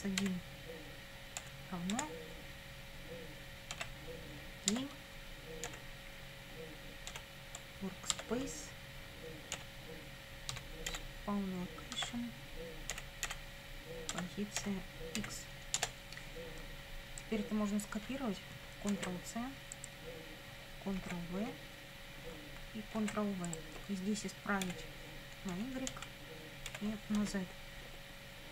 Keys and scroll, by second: 0.2 1, 1.4 =, 1.9 space, 3.7 g, 4.7 Tab, 5.7 ., 7.1 w, 8.1 Tab, 9.6 ., 10.5 s, 10.9 p, 12.0 Tab, 12.9 ., 13.3 p, 14.1 Tab, 14.6 ., 15.2 x, 15.8 Return, 18.9 ctrl+c, 21.0 ctrl+v, 23.0 ctrl+v, 24.7 BackSpace, 25.6 y, 25.9 Down, 26.7 BackSpace, 27.2 z.